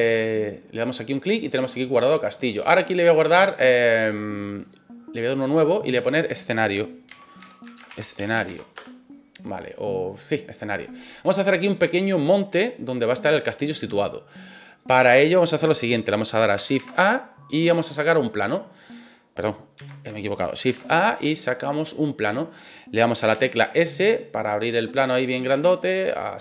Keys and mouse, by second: 2.6-4.7 right drag, 5.7 click, 5.8-9.6 drag, 16.7 shift+a, 19.8 ctrl+z, 20.6 shift+a, 23.3 s, 24.3 click, 25.0 middle click, 25.5 s, 26.3 click.